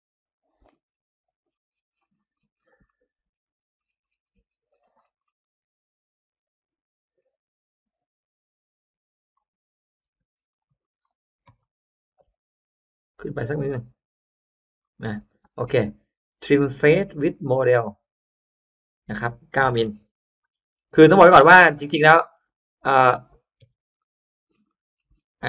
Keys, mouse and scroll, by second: 0.2 click, 0.6 middle click, 1.2 scroll up 1, 1.4 middle click, 1.9 middle click, 2.3 middle click, 2.8 middle click, 2.8-3.2 scroll down 1, 3.4-4.6 scroll up 3, 4.6 middle click, 5.3 middle click, 7.0 middle click, 9.0 click, 9.9 middle click, 10.0 space, 10.4 click, 10.6 click, 11.5 click, 11.5 m, 12.0 Up, 14.7 click, 15.1 middle click, 15.4 right click, 15.4 click, 15.4 space, 17.7 click, 19.5 9, 20.0 m, 20.4 m, 20.9 Return, 20.9 m, 22.2 middle click, 22.3 space, 22.4 click, 22.6 click, 23.5 click, 23.5 n, 23.9 middle click, 24.1-25.4 scroll up 3, 24.6 middle click, 25.2 Escape.